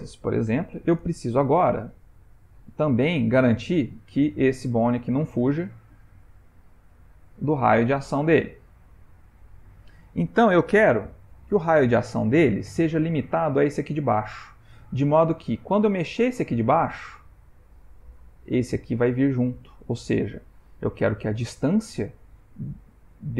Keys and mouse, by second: 2.3 click, 3.4 click, 4.9 g, 13.8 click, 16.1 g, 21.3 click.